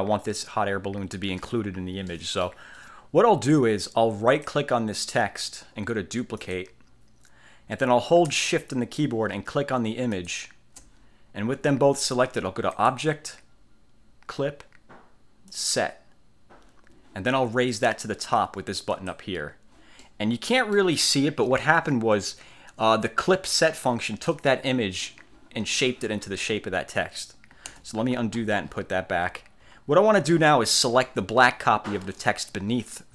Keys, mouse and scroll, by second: 2.2 middle click, 4.4 click, 6.5 click, 10.2 shift+click, 12.9 click, 15.6 click, 19.0 click, 20.1 middle click, 20.7 click, 20.7 right click, 20.7 middle click, 22.3-24.6 drag, 27.9 ctrl+z, 28.1-29.7 ctrl+scroll down 7, 29.9 scroll up 2.